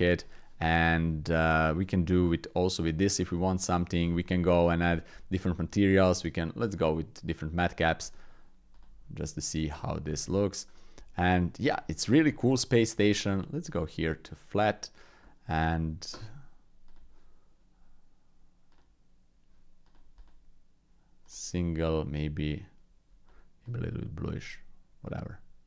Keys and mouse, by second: 1.0 shift+click, 3.4 shift+click, 3.9 Tab, 6.0-9.1 drag, 10.1 Tab, 10.7 click, 11.3-11.6 drag, 11.9 shift+drag, 12.3-12.9 drag, 13.7-15.1 drag, 15.2 middle click, 16.9-25.6 drag.